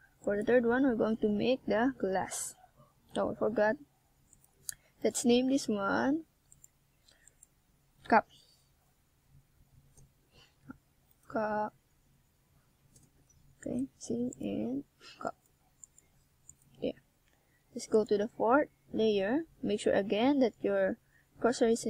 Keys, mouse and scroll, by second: 2.2 click, 2.7 click, 4.0 s, 5.2 click, 5.6 click, 7.6 click, 10.0 click, 12.2 KP_1, 15.2 shift+click, 16.1 shift+click, 16.8 shift+click, 20.9 click.